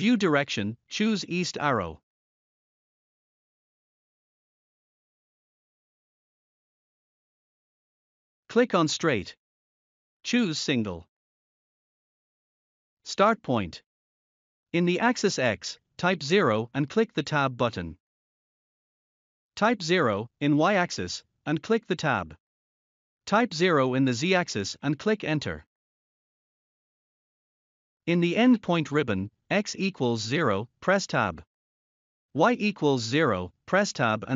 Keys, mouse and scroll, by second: 0.8 click, 2.4 click, 5.3 scroll down 1, 7.3 click, 12.6 0, 15.2 Tab, 17.2 0, 19.7 Tab, 20.5 0, 24.4 Return, 28.7 0, 31.0 Tab, 33.6 0.